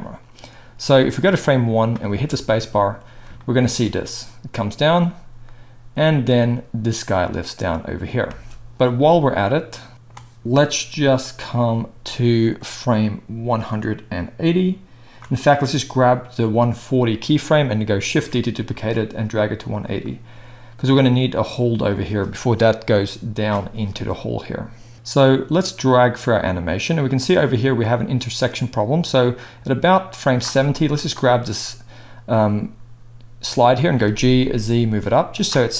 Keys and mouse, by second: 0.8-9.4 drag, 2.1 space, 8.2 space, 9.4-13.5 middle drag, 13.5-19.6 drag, 18.1 shift+d, 19.6-20.0 middle drag, 20.0-31.0 drag, 31.0-35.7 middle drag, 33.9 g.